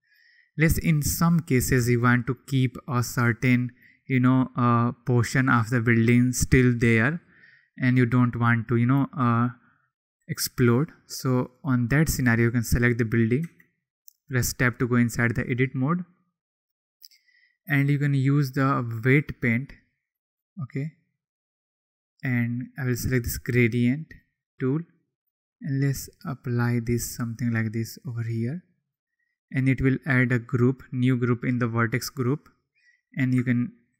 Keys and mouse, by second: 13.5 Tab, 17.0-19.3 drag, 24.0 click, 25.2 click, 29.9 click, 30.1-33.9 drag.